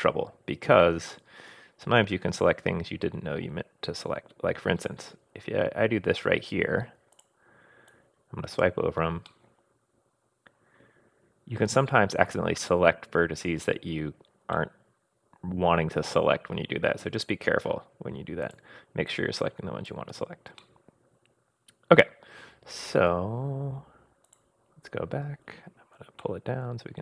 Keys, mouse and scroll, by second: 7.1 click, 7.2 middle click, 7.9 click, 9.3-12.2 middle drag, 14.5-18.2 middle drag, 18.2 scroll up 1, 18.4 click, 19.1 click, 20.6-23.0 middle drag, 23.0-23.4 scroll up 1, 24.3 click, 25.2-26.2 scroll down 1, 26.2-27.0 shift+middle drag.